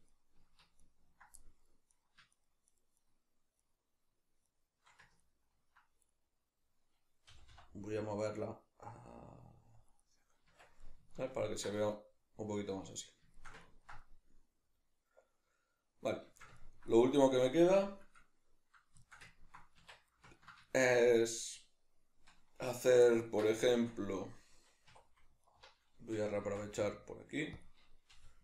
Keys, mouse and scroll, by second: 0.1 ctrl+right click, 0.8 ctrl+right click, 1.3 middle click, 1.9 right click, 2.3 shift+right click, 2.7 shift+right click, 3.0 shift+right click, 3.6 shift+right click, 4.5 shift+right click, 5.3 ctrl+right click, 6.1-9.9 middle drag, 7.3 g, 9.9 click, 10.0-25.5 middle drag, 10.5 Tab, 19.8 Tab, 24.9 2, 25.5 alt+right click, 26.5 shift+d, 27.6 click, 28.1 g.